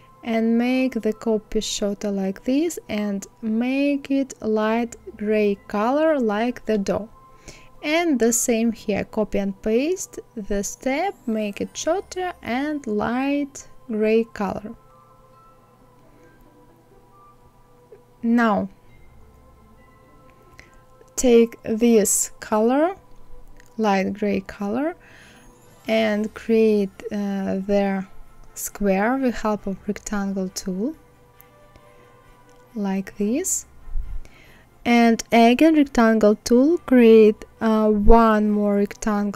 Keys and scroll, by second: 6.9 ctrl+c, 7.4 ctrl+f.